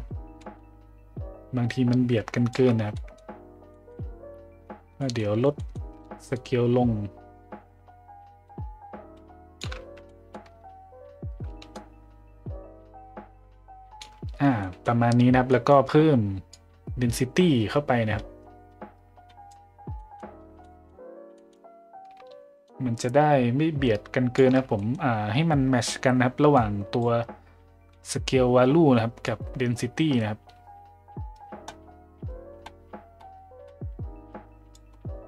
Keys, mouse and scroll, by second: 2.9 middle drag, 3.7 middle drag, 5.0 middle click, 5.6 middle click, 6.4-9.6 shift+drag, 10.0 middle drag, 11.7-14.0 shift+drag, 14.6 middle click, 15.5 middle click, 16.5-19.5 drag, 19.9 middle click, 20.6 middle drag, 21.4 middle click, 22.7-24.4 shift+drag, 24.7 middle click, 26.6 click, 29.3-34.8 drag.